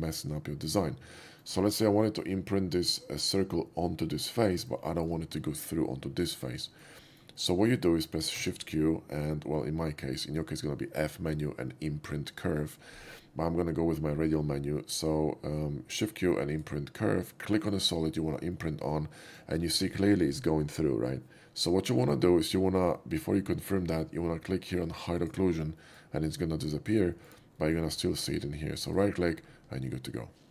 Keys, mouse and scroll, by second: 0.8-1.4 shift+middle drag, 1.8-2.1 middle drag, 4.4-4.7 middle drag, 4.9 shift+middle click, 5.8-6.5 shift+middle drag, 6.7-7.3 shift+middle drag, 7.4 shift+middle drag, 8.4 shift+q, 16.5 click, 17.5 click, 18.6-19.4 middle drag, 19.7 shift+middle drag, 20.0-20.4 shift+scroll up 2, 22.3 shift+middle drag, 22.8 shift+middle drag, 25.3 click, 25.9 middle click, 26.6-27.0 middle drag, 27.2 shift+middle click, 27.6 shift+middle drag, 29.0 shift+right click, 29.3 shift+scroll up 1.